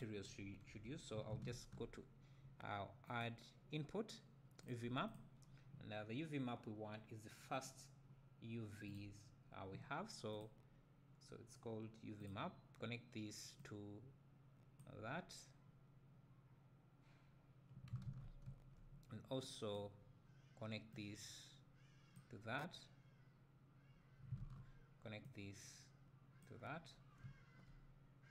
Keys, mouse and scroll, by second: 0.7 Delete, 5.1 click, 14.9-19.4 drag, 20.9-28.3 drag.